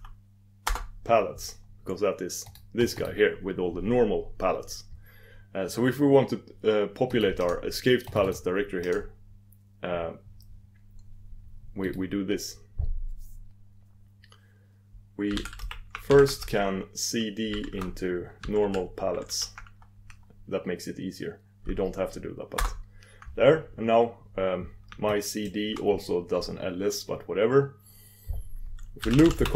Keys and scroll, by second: 7.6 super+d, 8.4 super+d, 9.1 super+d.